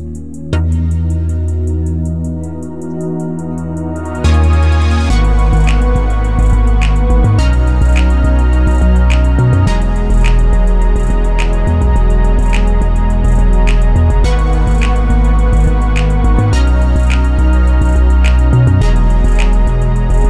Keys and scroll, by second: 16.4 x, 18.3 x.